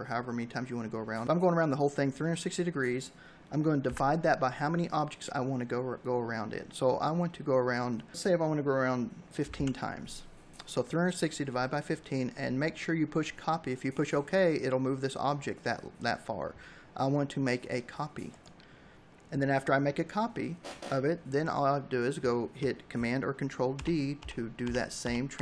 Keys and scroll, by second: 2.7 /, 7.9-8.8 typing, 22.5 ctrl+d.